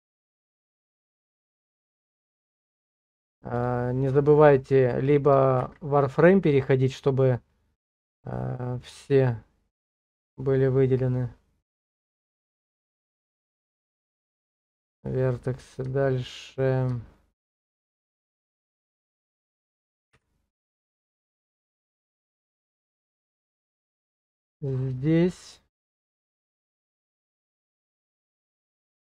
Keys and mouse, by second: 0.4-2.9 drag, 3.6 click, 5.8 shift+z, 8.2-12.5 drag, 16.0 shift+middle click, 17.1 shift+middle click, 20.1 b.